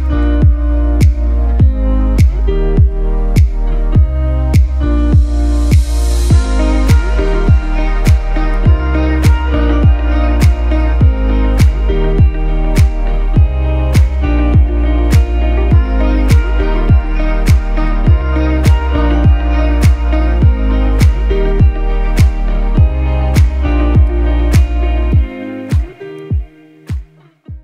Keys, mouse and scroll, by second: 5.0 click, 7.7-10.5 typing, 11.8-12.9 typing, 14.0-16.9 typing, 18.1-19.7 typing, 21.9 click.